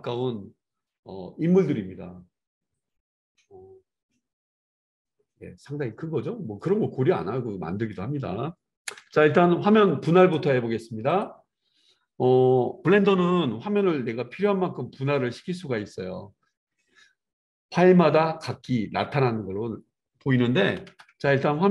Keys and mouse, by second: 9.0 KP_0, 10.2 click, 10.4-11.1 middle drag, 11.1-18.0 drag, 21.6 right click.